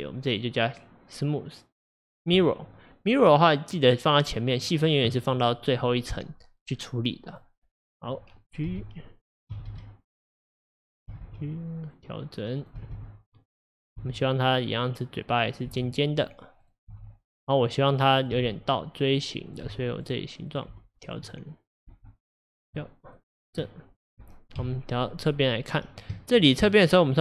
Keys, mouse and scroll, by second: 0.3-3.3 drag, 3.8 click, 7.4 click, 7.7-8.8 scroll up 1, 8.8 g, 11.0 click, 11.2 g, 12.7 click, 12.8 g, 13.9 click, 14.1 g, 15.5 click, 15.7 g, 16.7 click, 17.0 g, 18.3 click, 18.4 g, 19.5 click, 19.7 g, 20.5 click, 20.8 g, 21.7 click, 22.0 g, 22.8 middle click, 23.3-23.7 scroll down 3, 23.7 middle click, 24.6 KP_3, 25.4-26.3 scroll up 5, 26.3 shift+middle click, 26.7-27.2 scroll up 2.